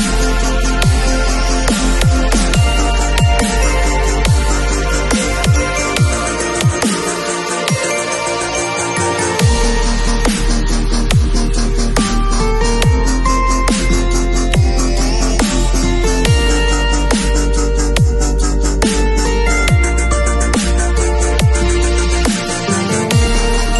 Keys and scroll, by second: 2.4 [, 4.6 [, 6.1 0, 13.9 v.